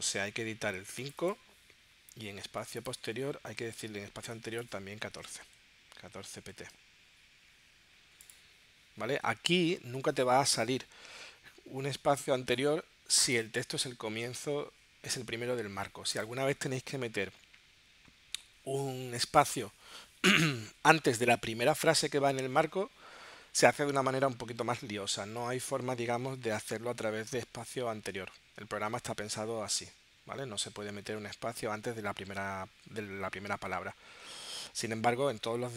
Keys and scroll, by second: 5.2 1, 6.4 p.